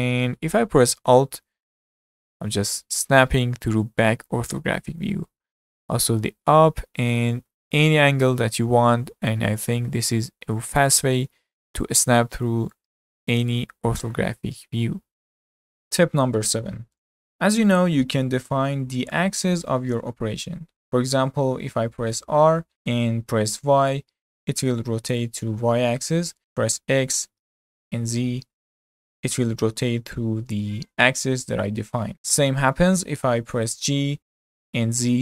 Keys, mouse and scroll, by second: 12.7-15.7 middle drag, 22.7 r, 33.7 g.